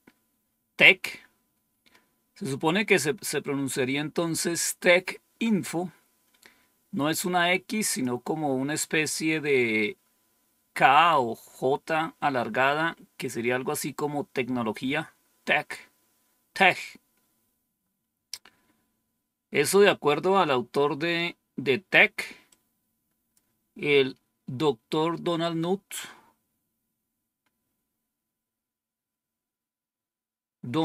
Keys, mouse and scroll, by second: 7.1 click, 18.2-22.4 scroll up 2, 22.4 click, 26.3-27.3 scroll up 2, 27.3-30.8 scroll up 1.